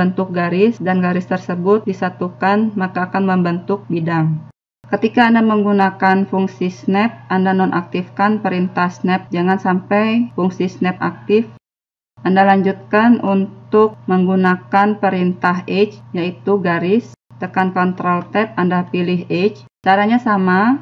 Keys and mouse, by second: 4.5-5.6 middle drag, 5.6 right click, 6.9 g, 7.5 g, 10.1 click, 11.6 right click, 11.8 g, 17.2 ctrl+Tab, 19.8 right click.